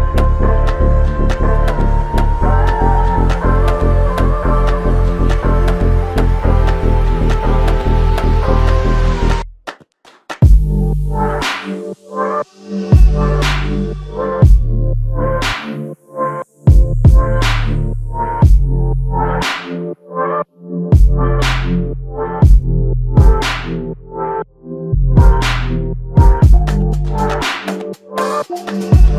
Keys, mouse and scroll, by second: 9.2 alt+click, 14.5 f.